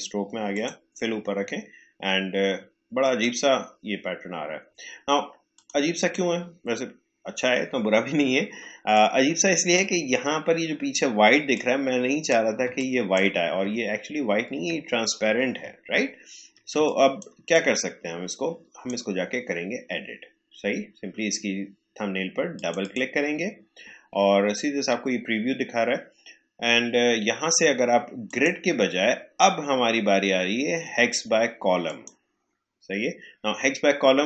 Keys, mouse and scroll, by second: 0.5 click, 5.5 click, 8.5 space, 8.9 click, 9.0 space, 11.5 click, 12.6 space, 12.7 click, 13.1 space, 13.7 alt+scroll up 1, 15.7 alt+scroll down 1, 16.7 space, 16.8 click, 17.2 space, 17.5-21.4 drag, 22.5 click, 24.2 alt+scroll up 1, 28.2 click, 31.8 click, 33.7 click.